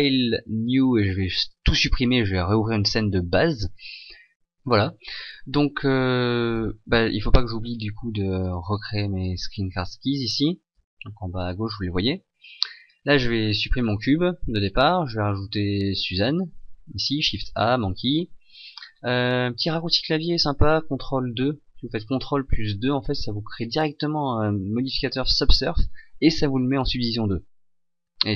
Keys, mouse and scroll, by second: 10.7 n, 18.4 shift+a, 18.8 scroll up 4, 21.2 ctrl+2.